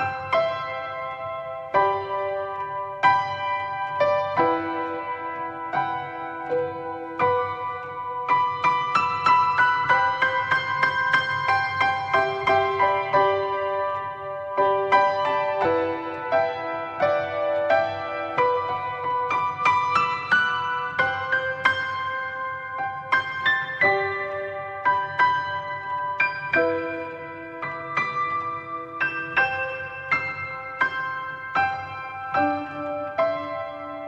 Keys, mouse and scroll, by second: 0.4 click, 7.6-8.9 drag, 12.9-17.0 drag, 17.3-22.8 drag, 22.8 middle click, 23.1-24.5 scroll up 3, 24.5-27.9 drag, 29.9-32.7 drag.